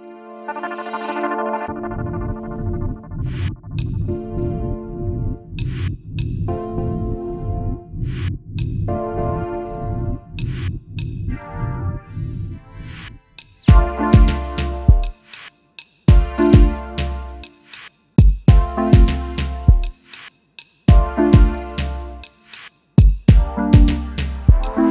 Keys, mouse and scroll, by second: 0.3 alt+shift+click, 2.5 space, 2.6 double click, 3.2-3.5 alt+scroll down 1, 5.8-6.1 alt+scroll up 1, 9.1 ctrl+x, 15.4 double click, 16.8 ctrl+f, 18.5 shift+click, 19.9 shift+click, 21.0 space, 22.4 space, 22.5 double click.